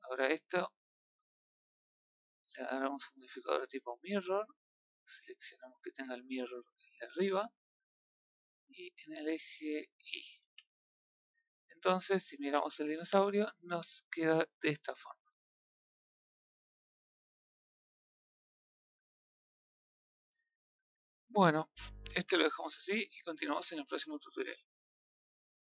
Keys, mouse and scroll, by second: 0.8 click, 1.4-4.1 middle drag, 4.1-5.4 drag, 6.7-7.9 middle drag, 7.9 click, 8.4 click, 8.9-10.4 middle drag, 10.4 a, 10.5-10.9 scroll down 4, 10.9-11.4 middle drag, 11.6 scroll down 1, 11.8-12.1 middle drag, 12.1 scroll up 2, 12.4 a, 12.6-13.0 middle drag, 13.0 a, 13.1 scroll up 4, 13.9-14.7 middle drag, 14.7 scroll down 1, 15.0 scroll up 1, 15.0-21.1 middle drag, 21.1-22.3 scroll up 2, 22.3-25.6 middle drag.